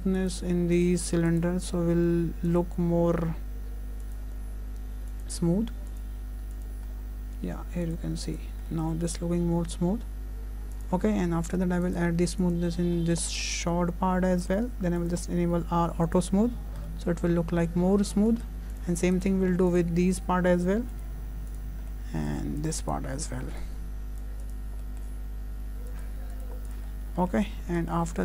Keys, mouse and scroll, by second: 0.0 scroll up 5, 0.2 click, 1.3 click, 1.6 right click, 4.1 click, 5.1 click, 6.6 click, 6.9-7.5 scroll down 1, 7.9 click, 8.3 click, 8.7 middle click, 10.8 click, 11.1 scroll down 4, 11.5 shift+middle click, 11.9 right click, 13.0 scroll down 2, 13.3 shift+middle click, 13.6-14.2 scroll up 3, 15.0 click, 16.2 click, 16.7-17.6 scroll up 3, 16.9 middle click, 17.9-18.2 scroll down 3, 18.2 shift+middle click, 18.5-19.2 scroll up 2, 18.7 click, 19.2 right click, 21.0 click, 21.5 click, 21.9 middle click, 22.6 click, 22.8 right click, 24.8 shift+middle click, 25.9 click, 26.3 click, 26.9 click, 26.9-27.5 scroll down 4, 27.2 middle click, 27.5 scroll up 2, 27.8 shift+middle click, 28.1 scroll down 1.